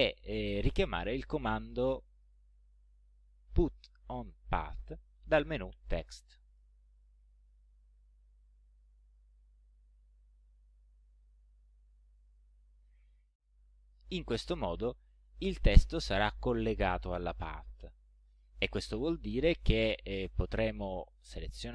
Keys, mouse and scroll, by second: 2.1 click, 6.5 click, 12.1 click, 20.6 click.